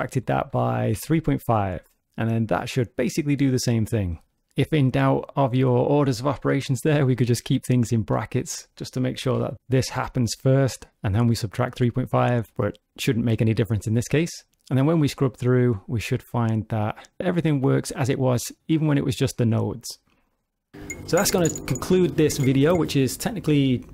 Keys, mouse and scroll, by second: 14.5 click, 17.2 click.